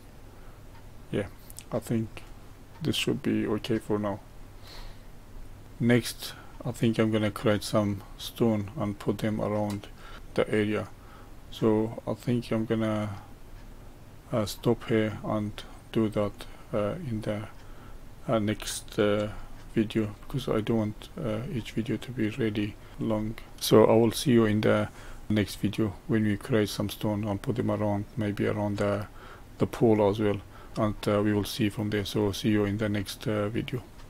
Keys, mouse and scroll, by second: 0.4-3.5 middle drag, 4.7-5.3 scroll down 2, 5.3-5.6 middle drag, 5.6 scroll up 1, 5.8-8.8 middle drag, 10.1-13.4 shift+middle drag, 16.3 click, 17.1 middle click, 17.7 scroll down 2, 19.3-20.6 shift+middle drag, 20.6 click, 21.7-23.5 middle drag.